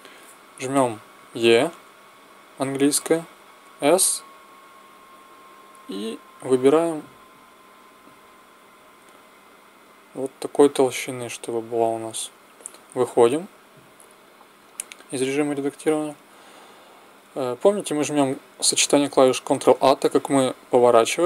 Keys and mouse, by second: 1.3 e, 13.2 Tab, 19.4 ctrl+a.